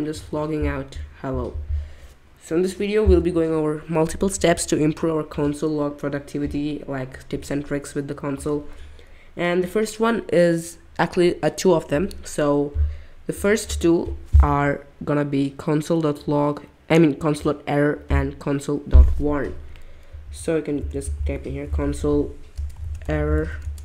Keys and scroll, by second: 0.1 ctrl+Tab, 3.0 BackSpace, 20.2 super+/, 20.8-23.8 typing.